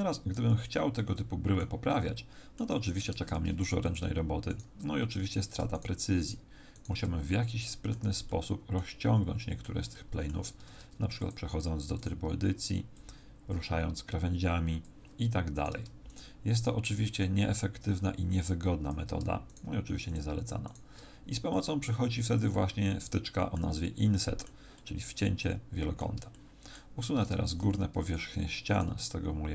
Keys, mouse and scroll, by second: 0.3 a, 0.9 middle click, 1.8 middle click, 3.2 ctrl+Tab, 4.4 right click, 5.2 z, 5.7 shift+right click, 6.4 shift+right click, 6.7 shift+right click, 8.2 middle click, 9.0 middle click, 9.9 middle click, 10.6 ctrl+Tab, 11.9 right click, 12.9 click, 15.5 right click, 16.0 shift+right click, 16.6 shift+right click, 17.2 click, 19.4 shift+right click, 20.0 shift+right click, 20.6 shift+right click, 21.5 click, 22.6 middle click, 23.7 middle click, 24.7 middle click, 26.3 shift+middle click, 27.4 ctrl+Tab, 28.7 right click.